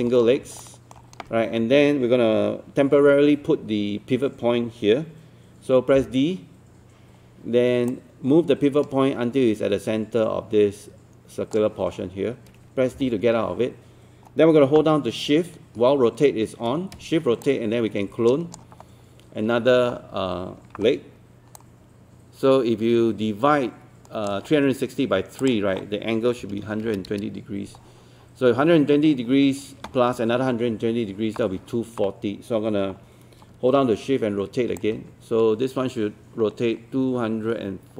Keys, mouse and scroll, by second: 0.1 scroll up 1, 0.6 alt+middle click, 6.0 d, 7.9-12.2 drag, 13.0 d, 13.4-15.1 scroll down 1, 17.4 shift+click, 21.6-25.2 drag, 26.4 KP_1, 29.1 scroll down 1, 34.8-37.9 shift+drag.